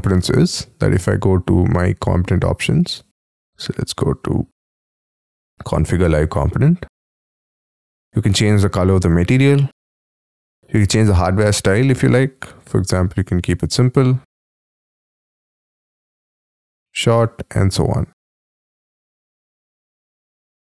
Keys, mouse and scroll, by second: 2.6 scroll down 2, 9.3-13.7 scroll down 3, 13.7-18.1 scroll up 5, 18.1 scroll down 3, 18.1 middle click, 19.4-20.6 scroll down 2.